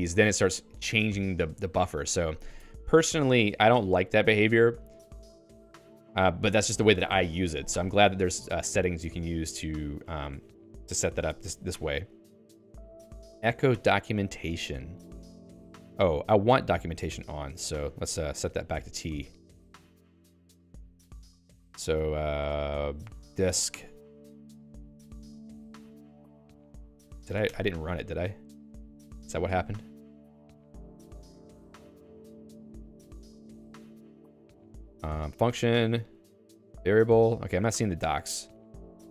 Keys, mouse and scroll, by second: 2.6 Down, 3.2 Escape, 4.0 d, 4.4 d, 5.6 d, 5.8 ctrl+s, 6.6 j, 11.2 ctrl+s, 12.8 j, 14.8 k, 17.9-18.9 typing, 19.2 ctrl+s, 22.6 (, 24.0 c, 25.7 Down, 26.2 Down, 26.8 Down, 27.2 Down, 29.0 ctrl+alt+x, 30.8-32.2 typing, 33.6 -, 34.4 Down, 34.8 Down, 36.0 Down, 36.6 Down, 37.2 Down, 37.6 Down, 37.8 Down, 38.2 Down, 38.8 Up.